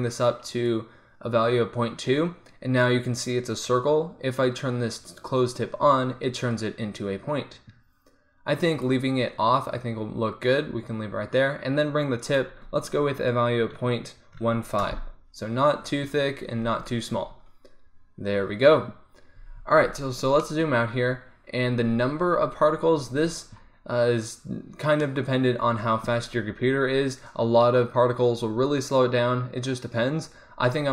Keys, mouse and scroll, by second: 5.1-7.0 drag, 8.9-15.2 drag, 19.6 z, 19.9 middle click, 20.4-22.8 drag, 22.8-25.1 middle drag, 25.1-30.0 drag.